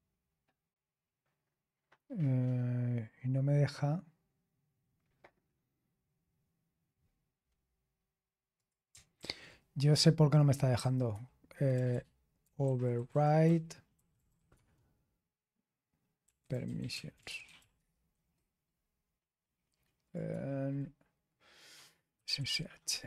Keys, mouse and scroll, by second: 8.5 click, 9.1 ctrl+t, 10.4-14.8 typing, 15.9-18.0 typing, 20.0 click, 20.2 space, 21.8-22.9 typing.